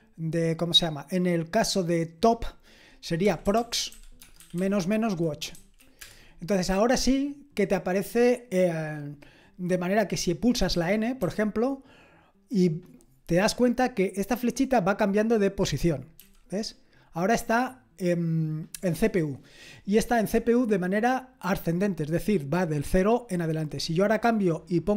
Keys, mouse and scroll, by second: 3.0-6.0 typing, 11.2 typing, 14.8-24.9 drag.